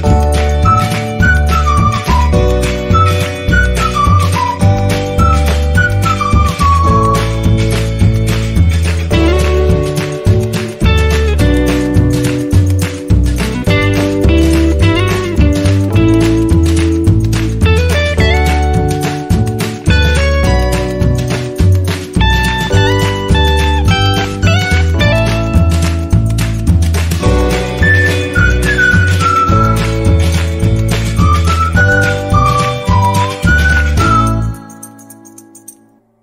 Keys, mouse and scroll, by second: 0.2 click, 2.3 click, 2.4 ctrl+=, 5.2 click, 7.1 click, 9.2 click, 16.3-19.7 drag, 19.7-36.1 drag.